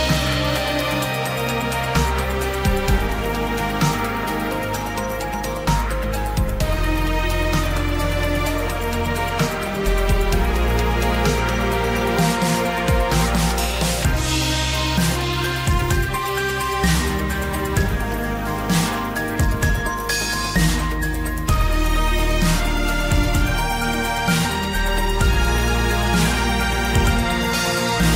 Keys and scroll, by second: 19.5 ctrl+t.